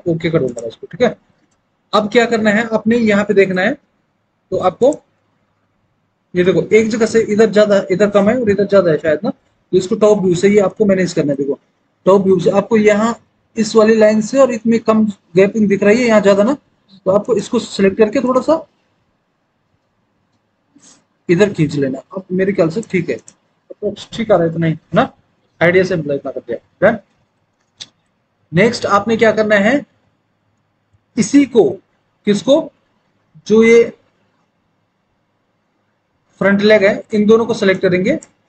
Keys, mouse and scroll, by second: 3.9 alt+w, 10.3 alt+w, 10.8 alt+w, 27.2 alt+w, 27.7 alt+w.